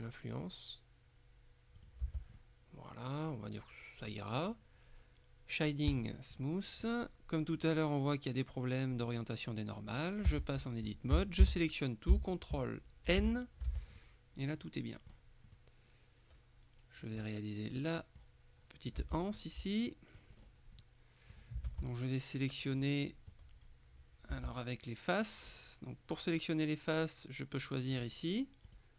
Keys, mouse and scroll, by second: 1.8 click, 2.1 Tab, 2.4-4.6 middle drag, 6.0 click, 9.2-10.5 middle drag, 10.4 Tab, 11.2 a, 13.2 ctrl+n, 14.1-15.7 ctrl+middle drag, 17.9 middle click, 19.1 Tab, 19.4-20.5 middle drag, 20.9 middle click, 21.8 ctrl+Tab, 24.4 a, 28.0 click, 28.8 click.